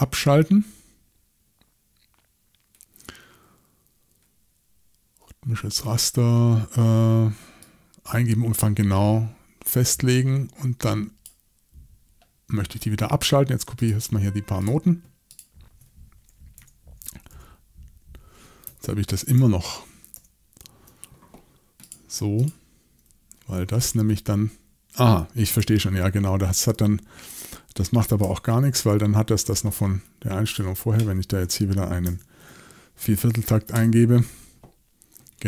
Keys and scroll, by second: 16.6-17.3 typing, 19.1 super+z, 19.4 super+z, 20.1 super+z, 25.6 super+z, 28.2 r, 32.0 shift+m, 33.4 shift+c, 33.7 Return.